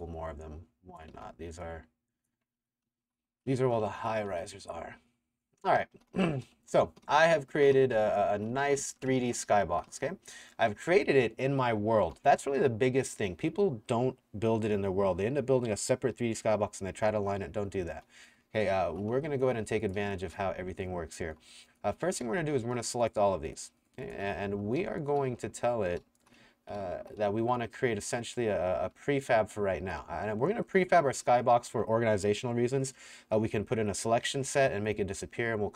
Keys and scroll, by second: 1.1 r, 2.6 Escape, 2.6-4.3 typing, 5.5 Escape, 5.6-10.7 typing, 11.8 w, 17.5-21.0 typing, 22.1-22.9 typing, 24.1-27.7 typing, 29.4 w, 30.0 s.